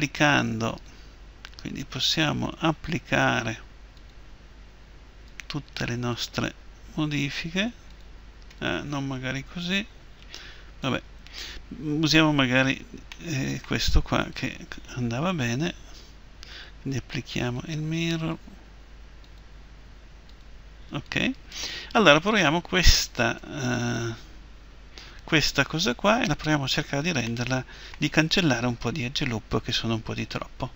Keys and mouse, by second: 0.7-10.2 drag, 10.2 Delete, 14.3-23.4 drag, 23.4 Tab.